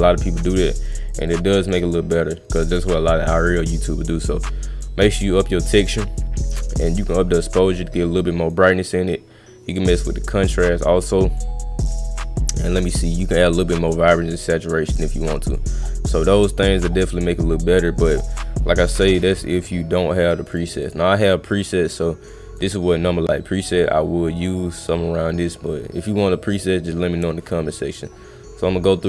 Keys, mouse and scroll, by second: 0.4 click, 0.8 click, 1.1 click, 1.2 click, 1.4 click, 1.7 click, 4.8 click, 6.9 click, 9.9 click, 11.6 middle click, 13.2 click, 13.9-15.5 drag, 15.7 middle click, 17.2 middle click, 17.4 middle click, 20.5 click, 20.8 click, 21.6-22.6 drag, 24.9-25.6 middle drag.